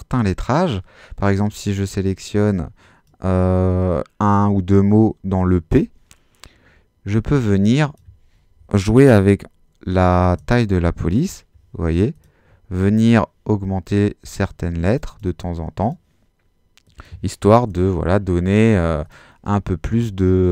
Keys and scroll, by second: 9.9-10.8 typing, 17.3-18.1 typing.